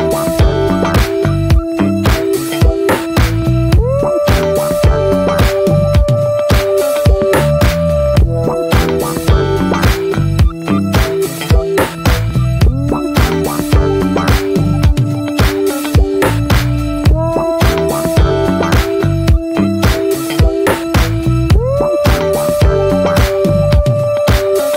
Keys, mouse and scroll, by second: 0.9 alt+middle click, 1.7-2.5 shift+middle drag, 2.5-3.0 scroll down 10, 5.8 click, 7.6-10.0 middle drag, 10.4-12.8 middle drag, 12.8-15.2 drag, 17.8 click, 18.7-21.3 drag, 21.6-24.3 drag, 24.5 drag.